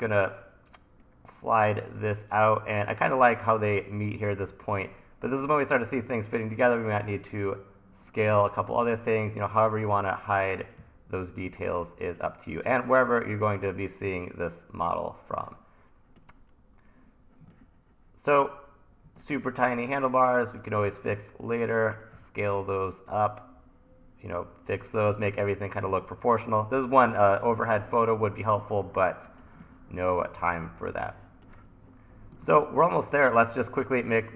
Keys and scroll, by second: 0.0 e, 8.8 t, 10.8 e, 12.6 t, 20.8 t, 22.2 e, 28.9 1, 30.9 1, 32.4 super+s.